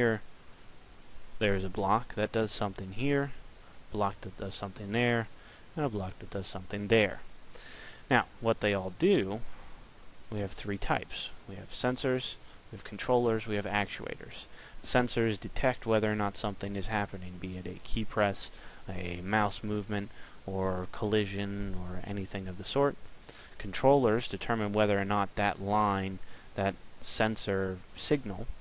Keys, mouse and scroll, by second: 9.8 click.